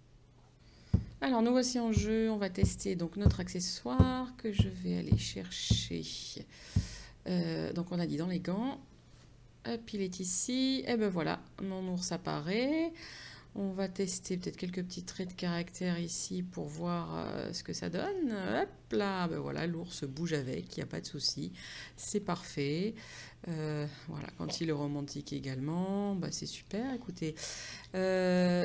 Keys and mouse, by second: 2.2 click, 6.8 click.